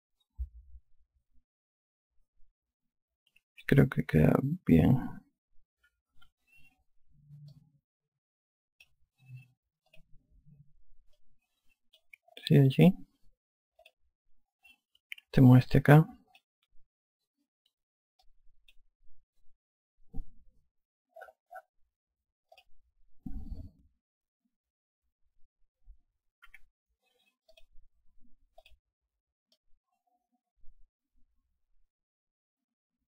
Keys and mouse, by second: 6.9 F1, 8.3 alt+click, 10.7 click, 12.0 alt+click, 14.6 click, 16.3 click, 19.0 click, 23.4 click, 28.3 click, 30.3 alt+click.